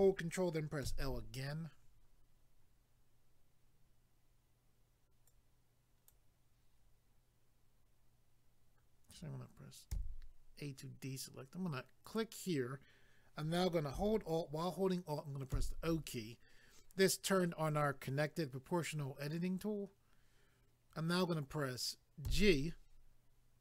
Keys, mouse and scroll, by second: 0.8 ctrl+i, 5.3 click, 9.9 a, 12.0 click, 15.5 alt+o.